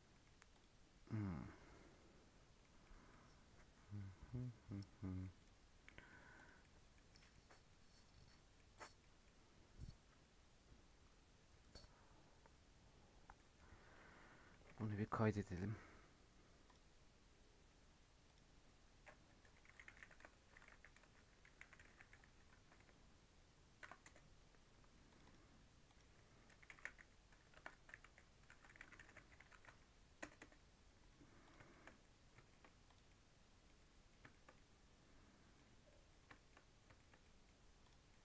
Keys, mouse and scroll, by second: 0.1 middle click, 0.5 click, 2.6-5.3 middle drag, 5.3 click, 5.7 scroll down 1, 5.8 middle click, 6.3 click, 6.5 scroll down 1, 6.6 middle click, 6.9 scroll up 2, 7.1 middle click, 7.3-7.6 scroll down 6, 7.6-8.7 middle drag, 8.7 click, 8.9-12.1 middle drag, 13.3-14.7 middle drag, 14.7 ctrl+s, 31.4 drag, 31.7 shift+middle click, 31.8 scroll up 2, 32.0-32.3 middle drag, 32.3 shift+scroll down 2, 32.5-32.8 shift+middle drag, 32.8 click, 33.0-35.6 middle drag, 35.6 scroll up 1, 35.8 middle click, 36.1 scroll down 2, 36.3-37.8 shift+middle drag, 37.8 click, 38.0-38.2 middle drag.